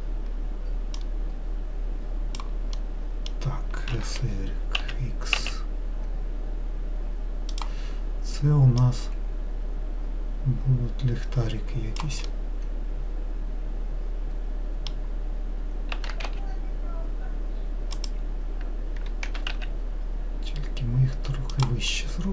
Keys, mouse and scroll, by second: 1.2 click, 3.1 middle click, 4.1 s, 9.1 click, 12.6-15.7 middle drag, 16.2 s, 19.6 g, 22.2-22.3 middle drag.